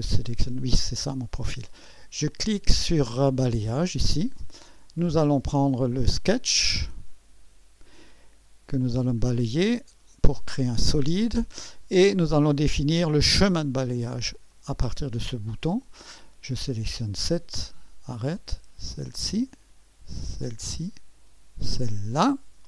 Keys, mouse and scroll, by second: 0.0-1.0 drag, 3.4 click, 5.0 click, 6.7-9.9 drag, 10.4-11.5 drag, 14.5-15.5 drag, 16.7-18.0 drag, 18.9 ctrl+click, 20.4-22.6 ctrl+drag.